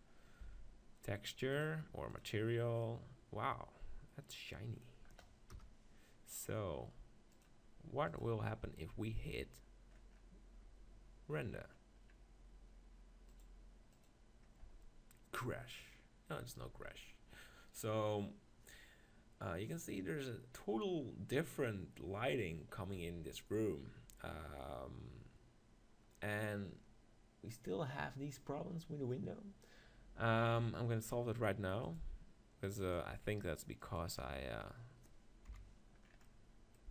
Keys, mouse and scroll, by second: 0.4 Tab, 1.5-3.2 drag, 2.8-4.8 middle drag, 5.5 KP_0, 7.5-9.2 drag, 10.2 middle click, 13.3-15.1 drag, 32.9-34.8 drag, 35.5 KP_7, 36.1-36.9 middle drag.